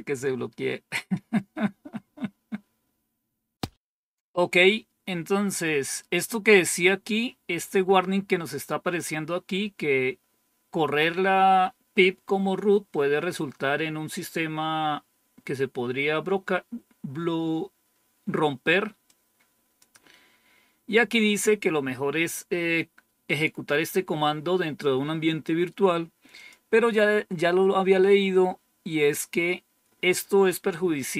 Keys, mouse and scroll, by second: 0.6-1.8 scroll down 3, 18.9 click, 26.2 click, 28.4-29.2 scroll down 1.